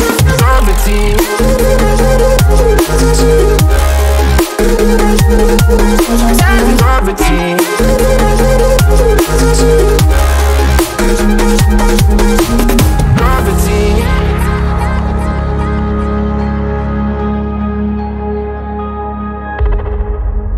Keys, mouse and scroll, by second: 0.2 alt+g, 8.2 click, 9.1 click, 9.7 click, 10.6-20.5 drag.